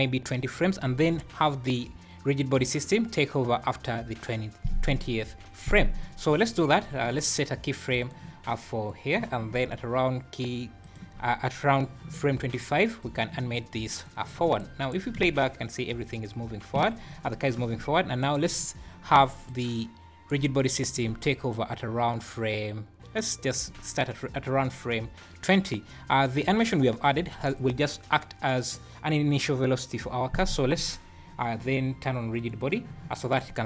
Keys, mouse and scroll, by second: 8.0 click, 8.9 click, 10.8 shift+right click, 13.0 click, 14.6 shift+right click, 15.1 space, 16.7 Escape, 18.2 shift+right click, 19.5 shift+right click, 21.5 shift+right click, 32.3 click.